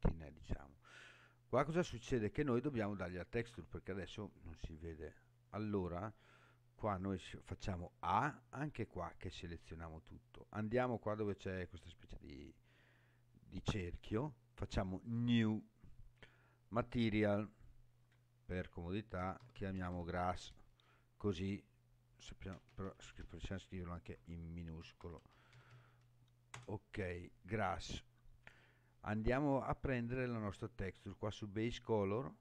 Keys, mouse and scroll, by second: 8.1 a, 12.2 click, 15.0 click, 17.5-28.1 drag, 19.9 s, 22.7 BackSpace, 22.8 BackSpace, 23.2 BackSpace, 25.7 s.